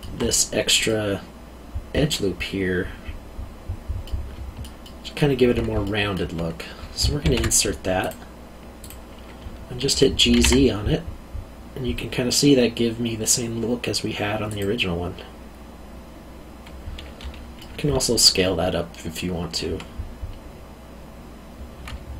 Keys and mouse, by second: 4.0 middle click, 5.8 alt+middle click, 7.2 ctrl+r, 8.0 click, 10.2 g, 10.3 z, 14.5 click, 17.6 middle click, 21.8 alt+middle click.